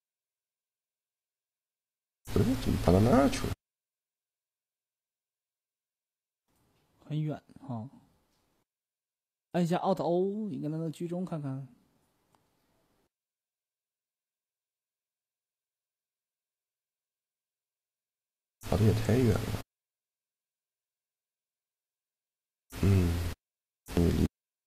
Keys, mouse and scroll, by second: 5.9-8.8 right drag, 9.2-10.8 right drag, 10.2 click, 11.1 middle click, 15.8-17.5 right drag, 16.3-17.9 drag, 17.9-21.5 right drag, 18.5-20.3 drag, 22.3 ctrl+a.